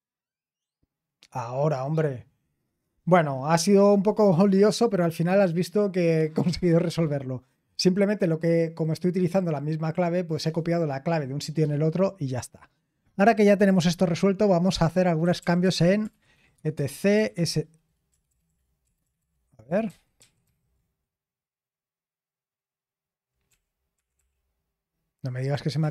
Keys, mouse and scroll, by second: 14.9-20.4 typing, 20.5 ctrl+c, 23.5-24.2 typing, 25.8 Return.